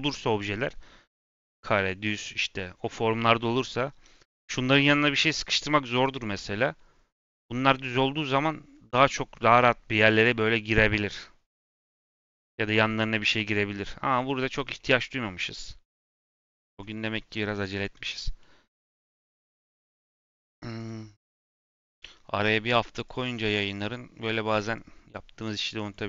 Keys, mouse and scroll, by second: 0.0 5, 3.0 2, 6.1 2, 15.7 b, 16.4 click, 16.9-17.8 scroll down 2, 17.8-18.8 scroll down 4, 17.9 middle click, 18.3 middle click, 18.8 middle click, 19.1 scroll up 1, 19.2-20.7 middle drag, 20.7 click, 21.8 click, 23.0 click, 23.3 click, 24.4 click, 24.7 click, 25.3 click.